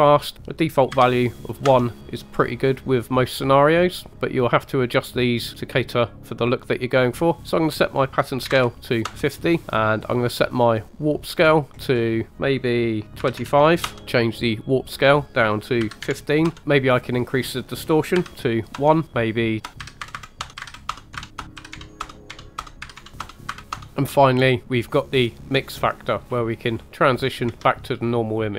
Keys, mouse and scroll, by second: 0.3 click, 5.6-6.9 scroll up 1, 7.5-9.1 drag, 11.4-12.7 drag, 13.1 click, 14.9 click, 17.3 click, 19.1-20.4 drag, 19.7 scroll down 2, 20.2 KP_0, 20.5-22.7 drag, 22.8 click, 22.8 scroll up 2, 23.4 click, 23.9 space, 25.0-26.4 drag, 26.8-27.3 scroll down 1, 27.3 scroll down 2, 27.5 space.